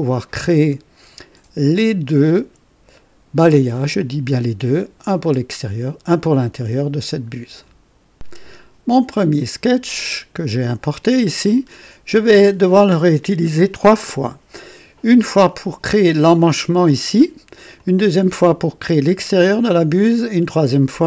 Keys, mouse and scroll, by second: 0.0 right click, 9.6 click, 11.3 scroll up 2, 11.7 right click, 12.6-15.4 drag, 17.7 click.